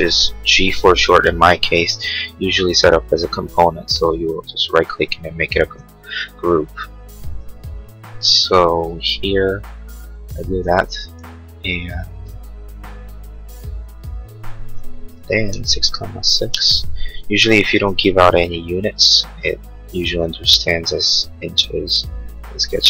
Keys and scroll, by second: 5.8 Escape, 10.7 r, 15.0-16.2 typing, 16.5 Return, 17.4 p.